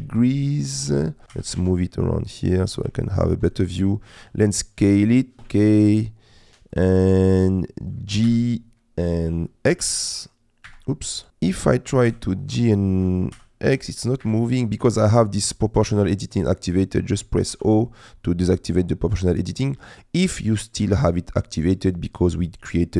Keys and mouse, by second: 1.3 g, 1.6 shift+z, 2.9 shift+middle click, 3.5 middle click, 4.1 s, 5.5 Tab, 8.3 g, 9.9 x, 10.7 Escape, 12.1 g, 12.9 Escape, 13.3 g, 13.7 x, 14.2 Escape, 17.5 o.